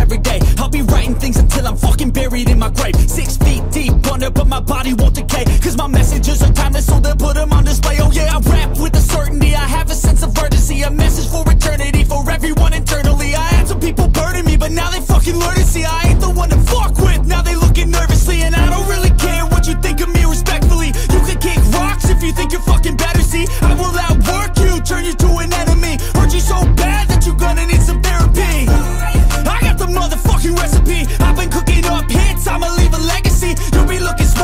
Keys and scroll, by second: 2.8-3.4 typing, 9.5 BackSpace, 11.6 typing, 20.3 ctrl+t, 26.0 Return.